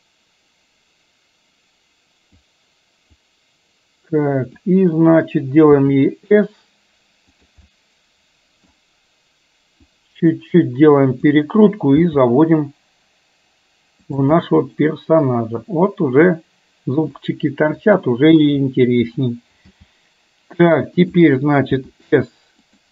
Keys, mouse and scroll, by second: 0.0-2.5 drag, 3.3-4.8 drag, 7.6-8.6 middle drag, 9.9-11.3 drag, 14.4-17.1 middle drag, 17.9 click, 18.4 KP_3, 19.8 g, 21.8 s.